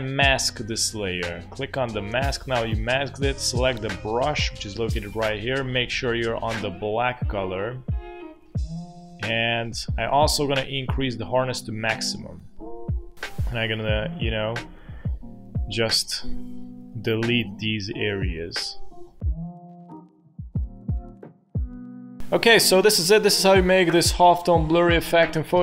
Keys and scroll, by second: 15.0 ctrl+z, 19.2-22.0 typing, 20.4 ctrl+z.